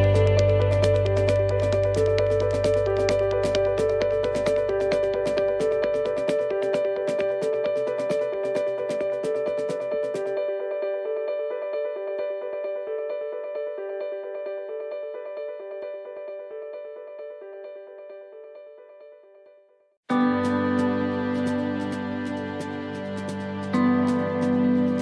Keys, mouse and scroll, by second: 0.0 shift+middle click, 0.6 middle click, 1.4 shift+middle click, 3.0 middle click, 3.6 middle click, 4.0 scroll up 1, 5.4 ctrl+r, 7.5 ctrl+r, 10.9 right click, 11.9 shift+right click, 12.7 click, 15.1 right click, 15.6 shift+right click, 16.5 click, 18.6 right click, 19.4 click, 22.1 right click, 22.9 click.